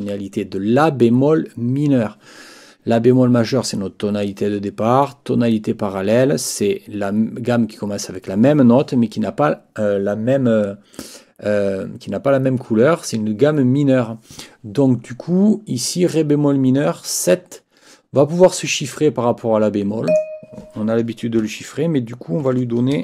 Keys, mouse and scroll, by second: 20.1 click, 22.4 ctrl+t.